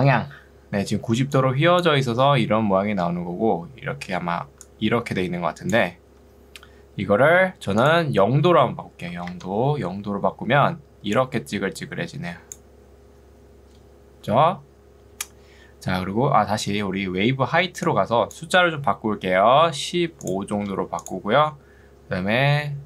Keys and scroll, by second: 1.1 ctrl+2, 9.1 0, 9.3 Return, 10.5 ctrl+2, 14.1 Escape, 16.7 ctrl+2, 20.7 5.